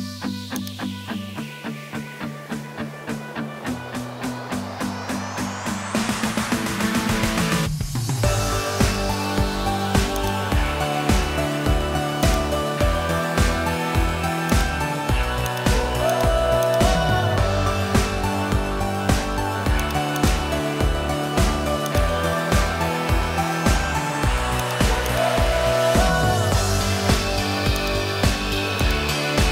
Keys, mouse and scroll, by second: 0.0 Tab, 0.6 click, 1.6 e, 10.8 e, 12.9 e, 16.1 shift+click, 16.6 shift+click, 17.7 g, 19.8 click, 20.9 alt+p, 22.6 g, 25.1 shift+click, 26.0 g, 28.8 click.